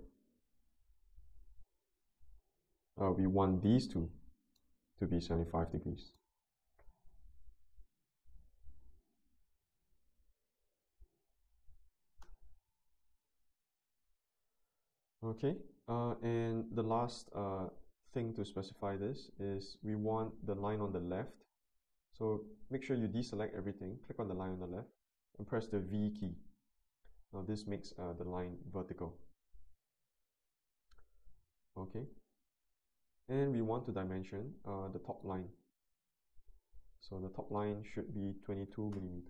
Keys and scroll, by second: 1.7 ctrl+z, 2.3 ctrl+z, 11.6-12.5 typing, 26.2 v, 38.4 2, 38.7 2, 38.9 Return.